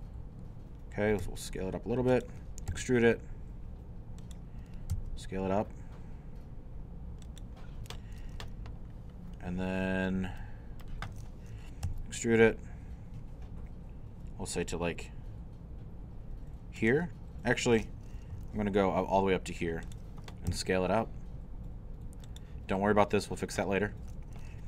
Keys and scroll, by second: 1.2 s, 2.7 e, 4.9 s, 11.9 shift+e, 18.1-18.9 typing, 20.5 s.